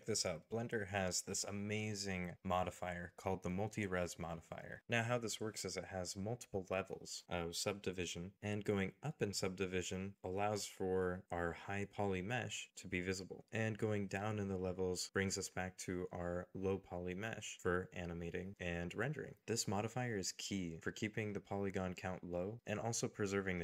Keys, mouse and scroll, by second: 10.8 middle click.